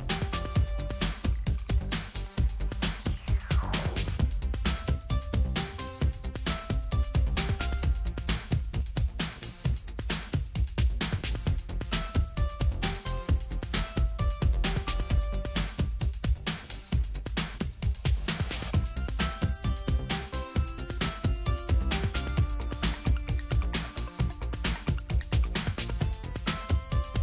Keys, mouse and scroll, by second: 1.1-3.9 typing, 4.6 Return, 7.0 click, 11.0 click, 13.7 ctrl+z, 15.2 click, 16.6 click, 18.8-19.9 drag, 21.7 click, 23.0 click, 25.4 click.